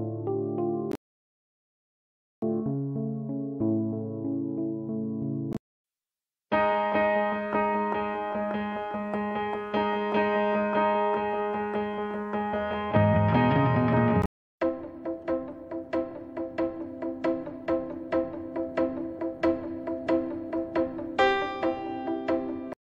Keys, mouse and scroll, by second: 2.6 Page_Down, 10.1 Page_Down, 20.5 click.